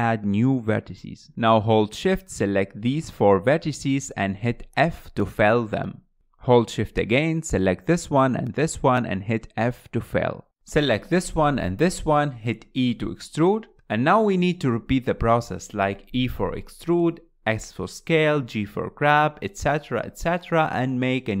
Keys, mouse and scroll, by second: 0.5 ctrl+right click, 0.9 scroll down 4, 1.1-2.8 shift+middle drag, 2.8 click, 3.4 shift+click, 3.9 shift+click, 4.5 shift+click, 5.5 f, 6.5 click, 7.2 shift+click, 8.4 f, 9.7 scroll up 2, 10.0 shift+click, 10.3 scroll down 3, 10.5-11.7 shift+middle drag, 11.7 e, 13.5-14.5 scroll up 3, 14.5 t, 14.6 click, 14.6 t, 14.7 scroll up 4, 14.8 shift+middle click, 15.5 click, 15.8-17.8 typing, 16.4 shift+middle click, 16.5 click, 16.6 click, 16.8 click, 16.9 click, 16.9 scroll down 1, 17.0 shift+middle click, 17.8 scroll down 2, 17.9 shift+middle click, 18.0 click, 18.2 click, 18.4 click, 18.7 click, 18.9-21.4 typing, 19.1 click, 19.1 shift+middle click, 19.5 shift+middle click, 19.6 click, 19.6 click, 19.9 click, 20.1 click, 20.1 shift+middle click, 20.3 click, 20.3 click, 20.4 shift+middle click, 20.6 shift+middle click, 20.8 click, 20.9 shift+middle click.